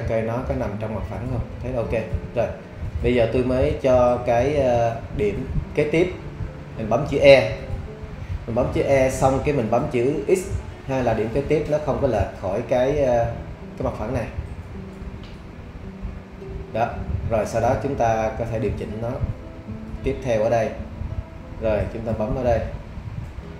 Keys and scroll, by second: 8.8 e, 10.3 x.